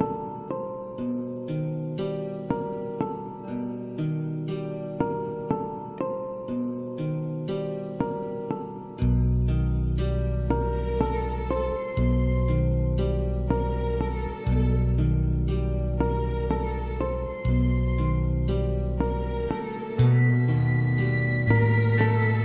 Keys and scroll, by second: 7.0 [, 10.1 ], 17.7 ], 22.3 [.